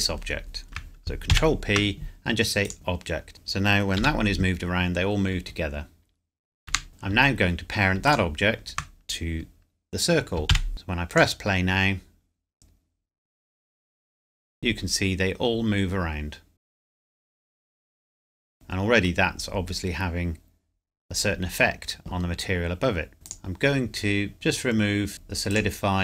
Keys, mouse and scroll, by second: 1.3 ctrl+p, 2.6 click, 3.9 g, 6.7 Escape, 8.0 shift+click, 10.5 ctrl+p, 10.7 click, 17.7 middle click, 23.1 click, 25.5 click.